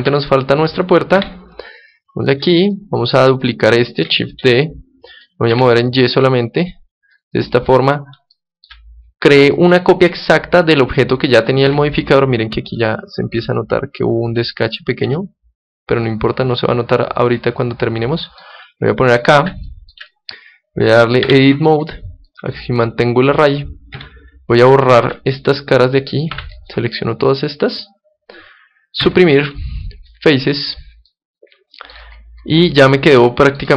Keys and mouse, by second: 0.0 Escape, 1.1 KP_7, 2.2-5.4 middle drag, 4.4 shift+d, 7.2-9.0 drag, 9.0-11.2 middle drag, 11.7 KP_7, 12.5-14.8 middle drag, 15.0 g, 15.1 middle click, 18.5-20.4 drag, 19.7-22.2 middle drag, 21.2 Tab, 22.3-24.1 middle drag, 24.1 KP_7, 25.0 a, 26.3 b, 27.5-29.8 middle drag, 29.0 Delete, 31.1-32.9 middle drag, 33.0-33.7 middle drag.